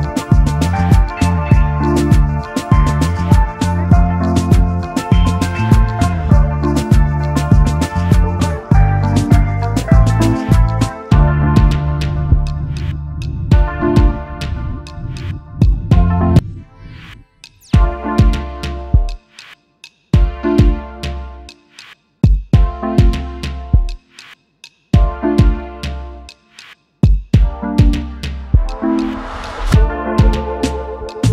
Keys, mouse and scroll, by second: 0.0-2.1 scroll up 1, 3.7-6.7 typing, 8.8 alt+shift+click, 10.2 double click, 13.9 double click, 15.1-17.2 scroll up 1, 19.7-22.2 typing, 29.7 double click, 30.5 double click.